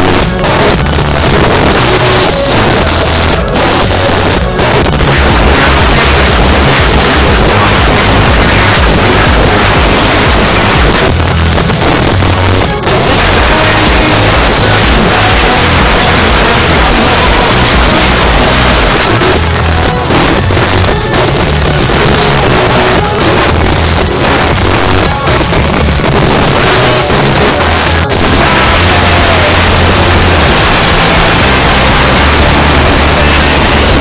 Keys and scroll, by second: 1.1 Down, 1.2 Down, 1.3 Down, 1.5 Down, 2.0 Down, 2.3 Return, 10.9 Page_Down, 18.9 Page_Down, 27.8 typing, 33.9 space.